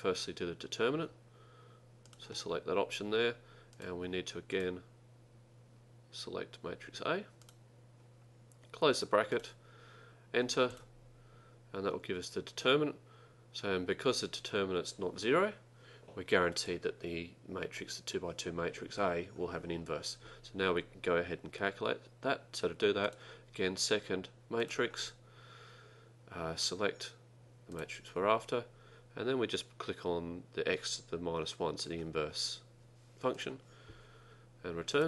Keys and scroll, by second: 2.2 Return, 7.5 Return, 9.4 ), 10.8 Return, 27.8 Return, 34.9 Return.